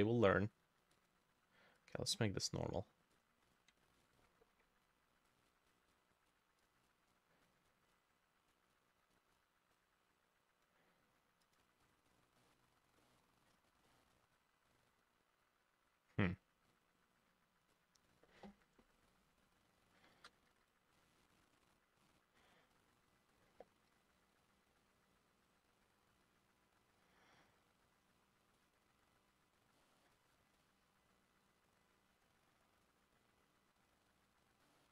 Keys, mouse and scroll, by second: 4.0 ctrl+u, 12.1-12.4 scroll down 3, 12.4 middle click, 13.0 middle click, 13.5-13.9 scroll up 1, 13.9 middle click, 19.5 double click, 20.0 shift+click, 20.5 ctrl+z, 22.4 double click, 23.9 Delete, 24.4 double click, 29.8 middle click, 34.7 middle click.